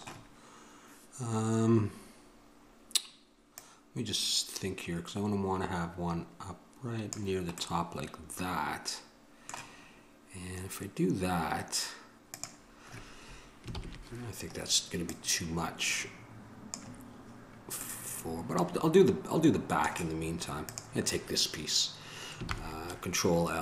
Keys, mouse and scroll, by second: 12.5-17.4 drag, 13.9 ctrl+l, 18.1-19.9 middle drag, 20.9-22.7 drag, 22.7 ctrl+l.